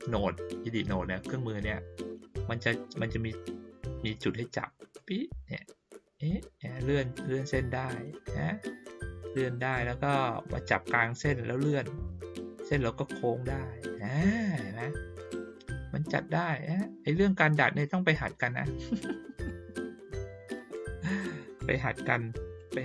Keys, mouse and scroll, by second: 4.9-9.3 drag, 11.2-13.9 drag, 15.5-17.7 drag, 17.8 click, 19.4 click, 22.5-22.8 drag.